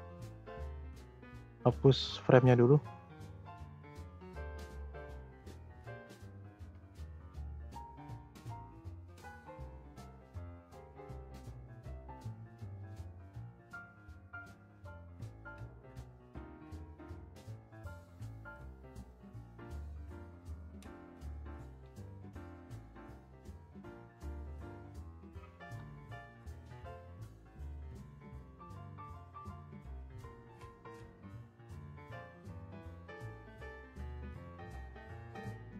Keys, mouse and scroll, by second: 1.6 click, 3.4-5.1 drag, 5.1-5.6 scroll down 3, 5.6-5.9 scroll up 3, 5.9 middle click, 6.3 shift+scroll up 1, 6.3 shift+middle click, 7.2-8.2 scroll down 1, 8.2-10.3 drag, 10.3-10.8 scroll down 2, 10.8-13.8 scroll up 1, 14.8 click, 15.0-20.8 right drag, 20.8-23.5 scroll down 2, 23.5-24.2 scroll up 1, 24.2-24.5 scroll down 2, 24.5-25.0 scroll up 4, 25.0 click, 25.6 Delete, 26.1 click, 26.5 shift+a, 28.7 click, 31.3 click, 32.7 click.